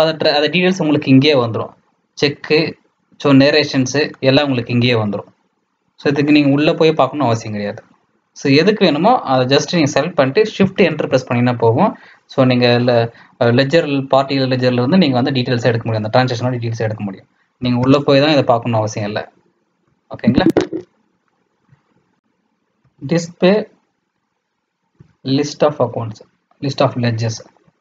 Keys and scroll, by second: 1.1 Down, 3.6 Down, 3.8 Down, 4.5 Up, 4.7 Up, 4.7 Up, 8.5 Up, 10.8 shift+Return, 17.8 Return, 19.9 Escape, 20.2 Escape, 20.5 Escape.